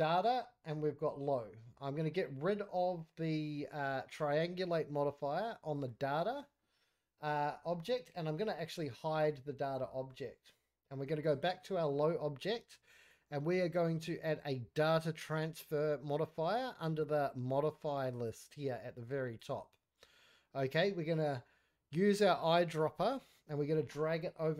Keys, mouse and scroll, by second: 3.9 click, 8.3 click, 9.6 scroll down 1, 9.8-10.1 middle drag, 11.0 click, 12.9-19.4 drag, 22.8 click.